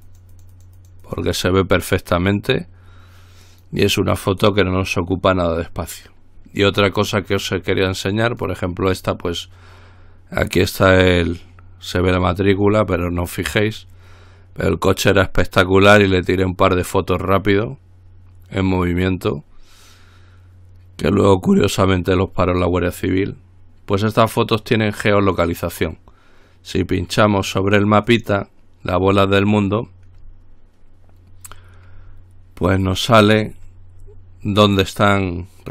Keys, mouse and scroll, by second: 0.0-2.2 drag, 2.4-4.3 drag, 8.5 click, 28.3 click, 33.1 click, 34.6-35.3 scroll down 1.